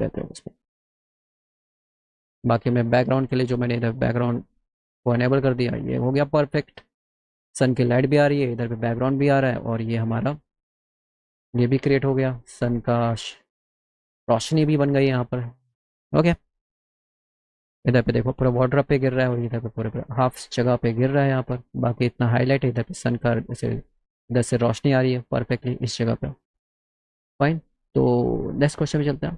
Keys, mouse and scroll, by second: 1.7 click, 4.4 click, 5.7 scroll up 1, 9.8 scroll, 10.6 scroll, 28.6 click.